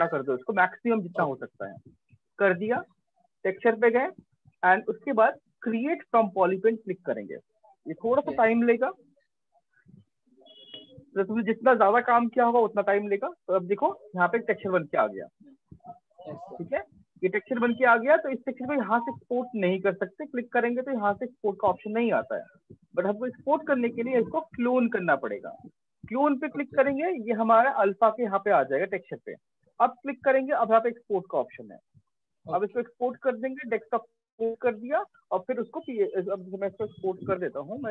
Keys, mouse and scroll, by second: 2.9 click, 6.0 click, 19.2 click, 24.2 click, 25.6-28.7 drag, 31.9 click.